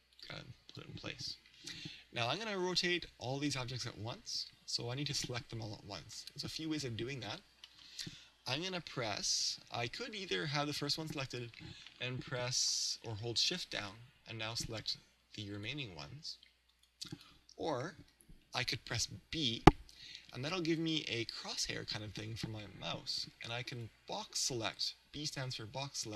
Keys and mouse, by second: 0.5 click, 7.7-9.7 middle drag, 14.5-18.6 right drag, 18.0 a, 19.4 b.